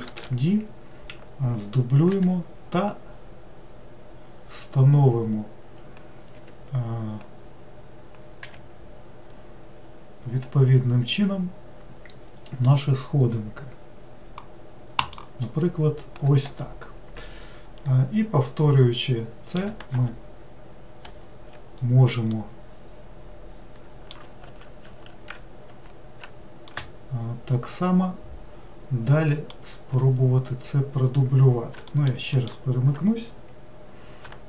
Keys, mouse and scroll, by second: 0.1 shift+d, 8.4 g, 19.9 shift+r, 21.0 shift+r, 22.3-24.5 middle drag, 24.5 ctrl+z, 24.9 ctrl+z, 26.7-29.9 middle drag, 31.9 alt+middle click, 32.4 alt+middle click.